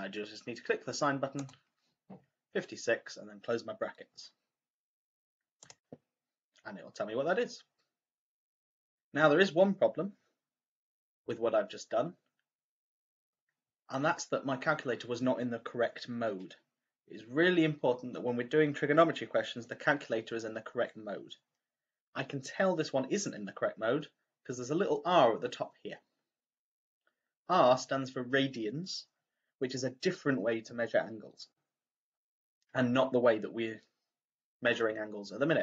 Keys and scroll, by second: 1.3 ), 5.5 =.